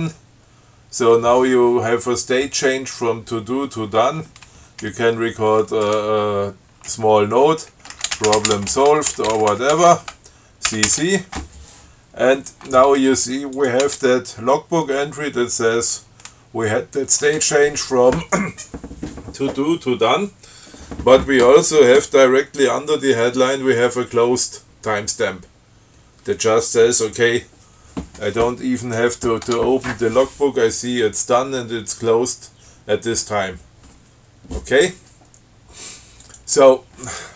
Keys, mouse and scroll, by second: 8.1-10.5 typing, 11.0 ctrl+c, 13.8 click, 14.1 Tab, 29.4 click, 29.7 Tab, 36.5 click.